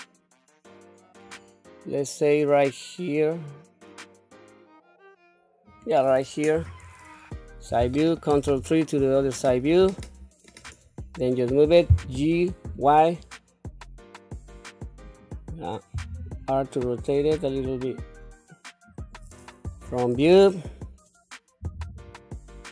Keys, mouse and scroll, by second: 6.5 KP_3, 8.4 ctrl+KP_3, 10.0 shift+middle click, 10.8 scroll up 1, 11.9 g, 15.9 r, 19.6 KP_1, 21.6 r.